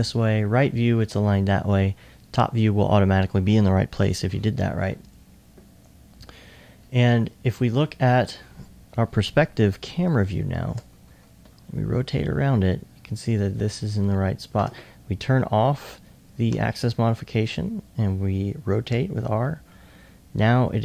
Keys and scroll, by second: 16.5 r, 18.9 r.